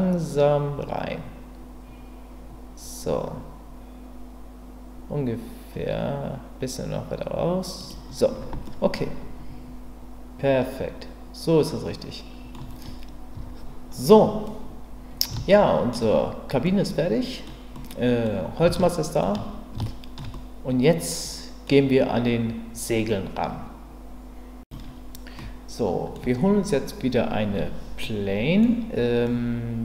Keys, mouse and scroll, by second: 7.8 click, 8.6-12.5 middle drag, 13.3 Tab, 14.4-15.3 middle drag, 15.5-15.9 shift+middle drag, 16.6-17.5 middle drag, 17.8-18.2 middle drag, 18.8-19.2 shift+middle drag, 19.9 shift+middle drag, 20.3-21.7 middle drag, 25.4 middle click, 28.0-28.6 middle drag, 29.2-29.8 middle drag.